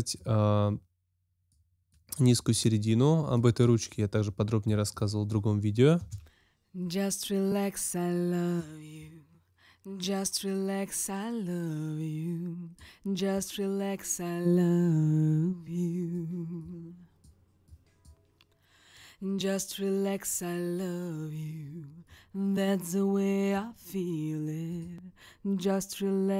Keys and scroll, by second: 5.9 space.